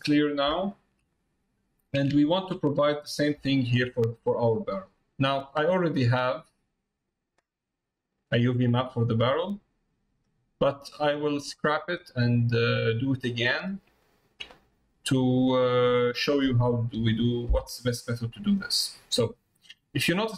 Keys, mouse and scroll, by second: 0.0 middle click, 0.6 shift+middle click, 1.2 middle click, 2.2 shift+middle click, 2.6 middle click, 3.6 shift+middle click, 4.1 click, 9.1-10.1 middle drag, 13.3 middle click, 14.1 shift+middle click, 14.6 middle click, 15.8 middle click, 18.1 middle click, 19.3 middle click, 20.2 middle click.